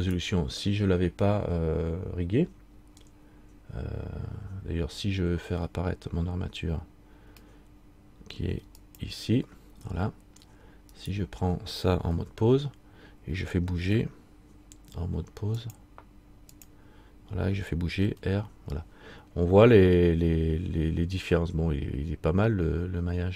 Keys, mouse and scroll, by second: 0.2 right click, 9.0 shift+click, 10.0-11.1 scroll down 1, 11.1 right click, 12.3 Tab, 15.8 click, 18.2 r.